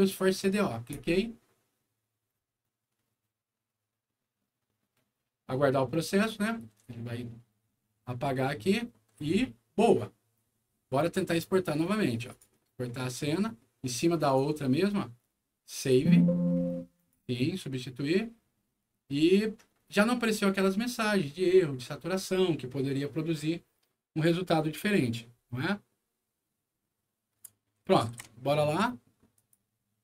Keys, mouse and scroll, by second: 0.9 click, 12.2 click, 14.2 click, 15.7 click, 16.9 click, 28.0 super+e, 29.3 click.